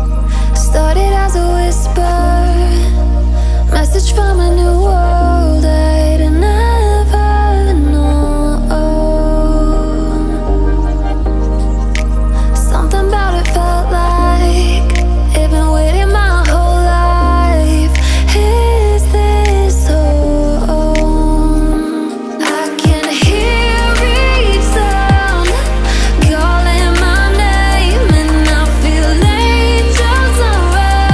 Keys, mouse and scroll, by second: 2.4 F7, 3.5 alt+scroll up 1, 4.5-10.2 drag, 10.2-10.5 alt+scroll down 1, 11.3-13.1 drag, 13.1-14.4 drag, 14.4 alt+scroll up 1, 15.7 alt+shift+click, 16.7 click, 17.8 alt+scroll down 1, 18.2 click, 18.9 alt+scroll down 1, 19.6-20.2 alt+scroll up 1, 21.1 alt+scroll down 1, 22.4 click, 25.4-28.3 drag, 28.3 alt+scroll up 1, 29.2-30.9 drag, 30.9 ctrl+].